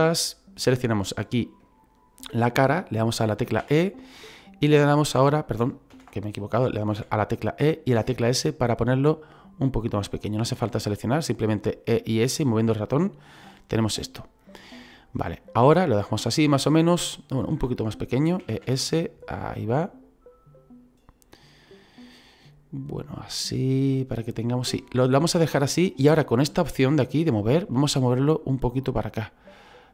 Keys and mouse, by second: 3.6 e, 5.4 click, 5.9 ctrl+z, 15.1 click, 16.2 middle click, 17.5 ctrl+z, 18.4 e, 18.6 s, 24.4 click, 24.8 middle click, 27.2 click, 28.4 click.